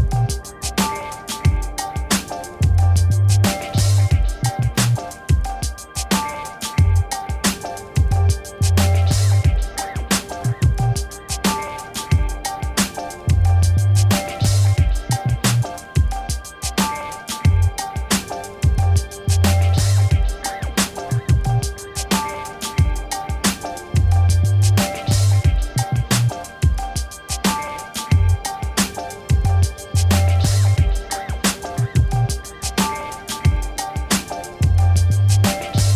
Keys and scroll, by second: 2.2-3.3 typing, 4.7-6.1 typing, 7.8 l, 8.1 i, 8.3 n, 8.4 e, 9.1 Return, 25.3 space.